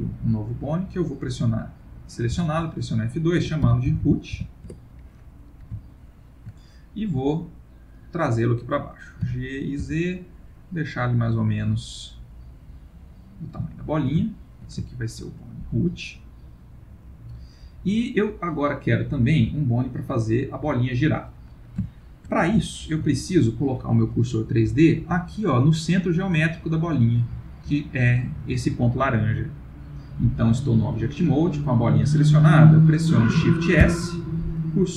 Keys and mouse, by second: 0.5 click, 2.3 F2, 4.0 o, 5.9 shift+middle click, 8.0 click, 9.2 g, 13.8 ctrl+middle click, 14.3 shift+middle click, 14.8 ctrl+middle click, 17.0 click, 19.4 Tab, 19.9 click, 21.9 shift+middle click, 22.3 shift+middle click, 22.6 ctrl+middle click, 26.1 middle click, 33.8 shift+s.